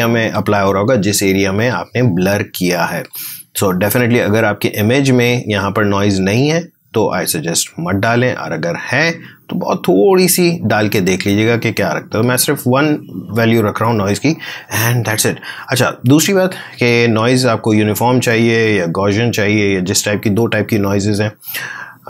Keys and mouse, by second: 7.8-13.2 drag, 18.7 click.